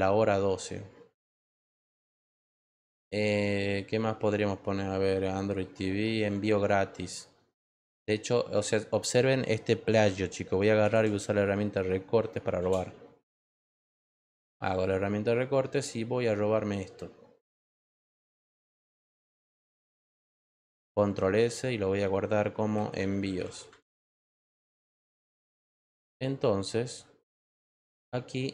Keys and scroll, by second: 10.4-11.5 typing, 12.5 Return, 21.1 ctrl+s, 22.4-23.9 typing.